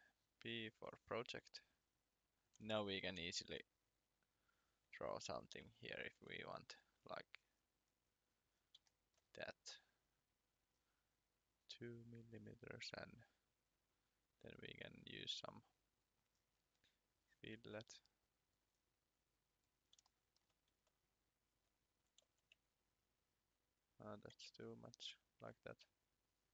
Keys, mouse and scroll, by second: 0.4 click, 3.4 r, 4.7 click, 5.6 Escape, 6.2 e, 8.9 shift+middle click, 9.6 click, 14.2 click, 16.6 scroll down 1, 17.6 click, 21.4 click, 22.2 4, 24.0 click, 24.3 1, 26.0 click.